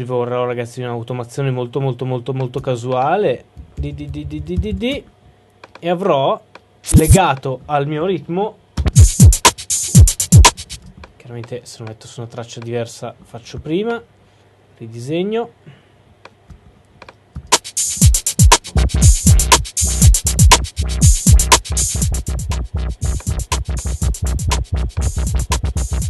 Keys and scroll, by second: 3.7 super+d.